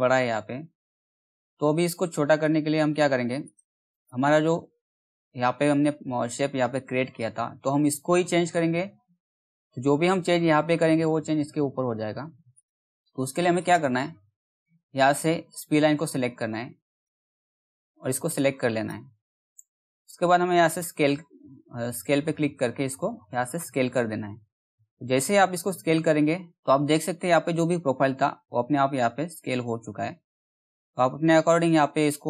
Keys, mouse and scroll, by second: 0.0 alt+middle click, 3.0 click, 4.2 alt+middle click, 5.4-6.5 scroll up 1, 6.5-7.3 scroll down 1, 7.3 middle click, 7.5-8.1 scroll up 1, 8.1 scroll down 1, 9.6 alt+middle click, 12.1 click, 16.4 click, 17.1-17.4 scroll up 1, 17.9-20.2 drag, 21.0-21.6 scroll down 1, 21.8 alt+middle click, 23.4-26.5 drag, 26.5 alt+middle click, 28.5-32.2 drag.